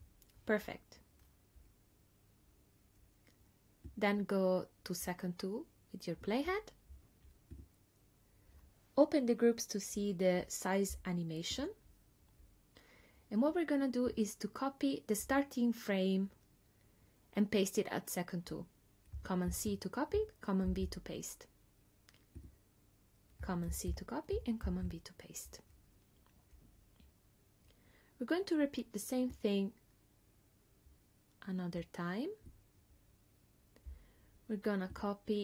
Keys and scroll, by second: 19.5 super+c, 20.7 super+v, 23.7 super+c, 24.7 super+v.